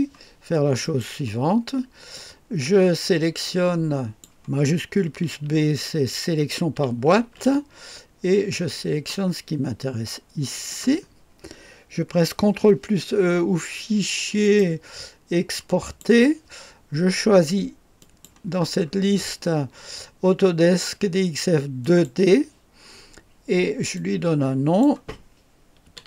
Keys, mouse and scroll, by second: 0.8 click, 2.1-4.3 drag, 7.2 shift+b, 9.1-10.8 drag, 14.4 click, 15.8 click, 18.0 click, 18.8-21.8 scroll up 1, 21.8 click, 24.0-25.4 drag, 25.6-26.0 typing.